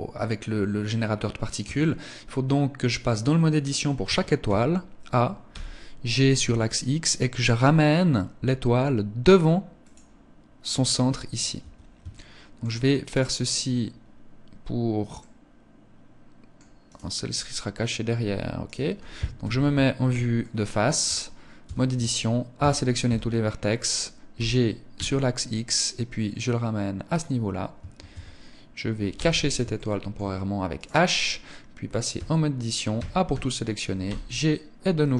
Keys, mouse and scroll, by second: 1.0 Tab, 2.4 scroll up 1, 3.4 a, 3.8 a, 4.8 g, 9.2 click, 11.0 Tab, 11.4 shift+middle click, 12.4 right click, 14.5 middle click, 18.0 right click, 18.7 KP_1, 19.7 shift+middle click, 21.0 Tab, 21.8 a, 22.8 scroll up 2, 23.7-24.0 scroll up 1, 23.7 g, 26.6 click, 27.4 Tab, 28.4 h, 29.0 shift+middle click, 30.0 right click, 30.6 scroll up 3, 31.5 Tab, 32.3 a, 32.7 a, 33.4 g.